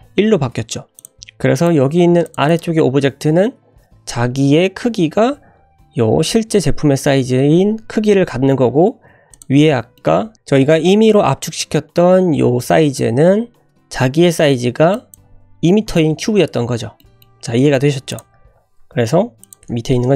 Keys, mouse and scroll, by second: 0.7-1.0 scroll up 2, 1.0 click, 1.1 `, 1.1 g, 1.8-2.2 scroll up 2, 2.2 click, 2.5 click, 9.3 click, 9.9-10.3 shift+middle drag, 14.9-16.3 drag, 16.5-17.0 scroll down 3, 17.0 middle drag, 17.6 ctrl+z, 18.1 click, 18.3-18.6 scroll up 2, 18.8 `, 19.0 scroll up 2, 19.4 click.